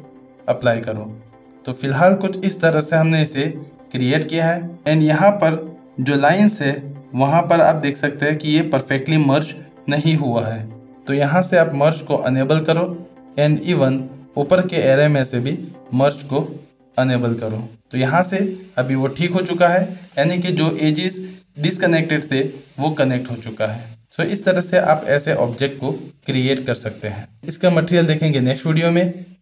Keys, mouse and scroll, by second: 1.5-2.4 middle drag, 2.6 shift+middle drag, 3.4 shift+middle drag, 5.4-6.0 shift+middle drag, 7.8 shift+middle click, 13.7 click, 14.4 click, 20.2 middle click, 21.0 shift+middle drag.